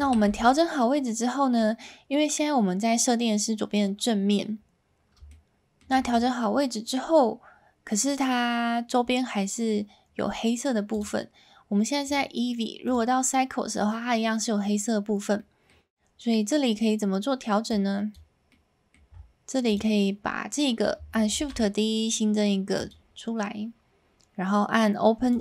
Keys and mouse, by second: 0.1 alt+a, 0.9-1.5 middle drag, 5.2-5.8 shift+middle drag, 6.6-8.1 middle drag, 11.0 click, 12.2-13.0 drag, 15.4 middle click, 17.7 click, 18.4 middle click, 19.6 click, 21.4 shift+d, 22.7 click, 25.3 click.